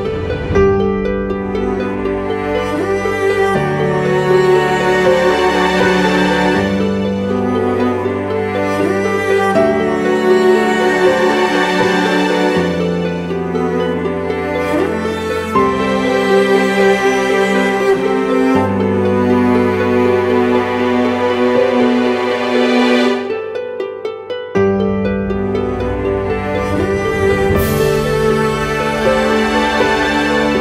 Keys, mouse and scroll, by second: 0.7 Right, 3.6-5.3 scroll up 1, 5.6 ctrl+t, 9.7 Return, 12.4 shift+click, 14.5 double click, 20.9 ctrl+t, 21.8 Right, 22.0 Right, 23.1 Left, 23.3 Left, 23.9 Right, 23.9 Left, 24.3 Right, 24.7 Return, 27.7 Right, 27.8 Right, 30.1 Right, 30.3 ctrl+t.